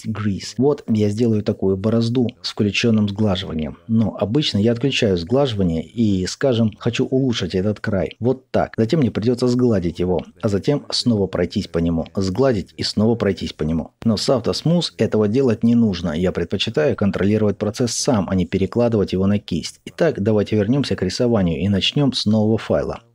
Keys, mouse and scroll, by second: 4.6-5.6 middle drag, 5.6-15.3 ctrl+drag, 15.3-21.1 ctrl+middle drag, 21.1 click, 23.0 click.